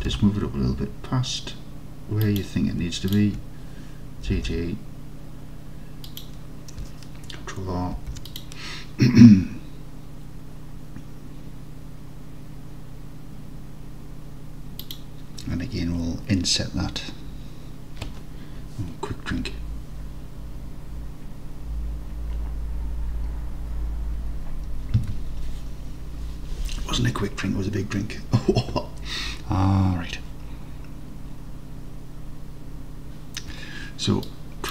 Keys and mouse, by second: 0.1 g, 0.2 g, 2.3 click, 4.4 g, 4.5 g, 6.1 click, 8.1 ctrl+r, 14.9-18.2 drag.